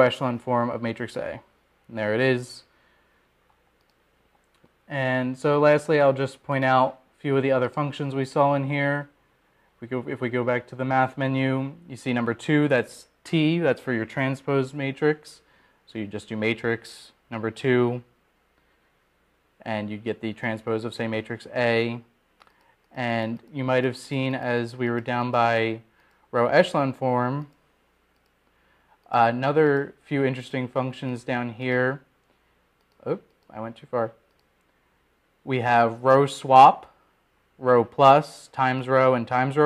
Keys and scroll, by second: 1.4-9.4 Return, 10.4 Right, 25.4 Down, 26.2 Down, 26.8 Down, 27.4 Down, 27.7 Down, 29.0 Down, 29.6 Down, 30.2 Down, 30.6 Down, 31.2 Down, 31.9 Down, 33.2 Down, 33.8 Down, 35.2 Down, 36.1 Down, 36.1 Up, 36.7 Up, 38.0 Up.